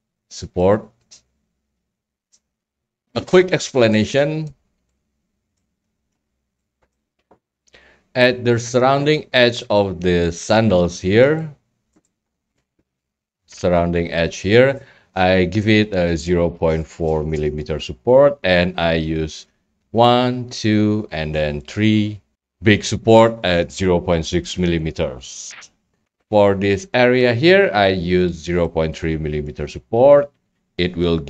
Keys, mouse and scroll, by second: 0.6 click, 1.0 click, 1.6 click, 2.6-3.7 middle drag, 2.6 scroll, 4.4 right click, 4.6 middle click, 4.7 scroll, 5.6 right click, 6.1 scroll, 6.9 right click, 7.1 scroll, 10.5 right click, 11.2 scroll, 11.5 scroll down 1, 11.9 right click, 12.6 right click, 21.7 click, 22.3 d, 25.9 right click, 25.9 scroll, 27.0 middle drag, 27.9-28.6 middle drag, 27.9 scroll, 28.6-29.1 right drag, 29.5 scroll, 29.8 middle click, 30.0 middle click, 30.1 middle click, 30.6-31.1 middle drag.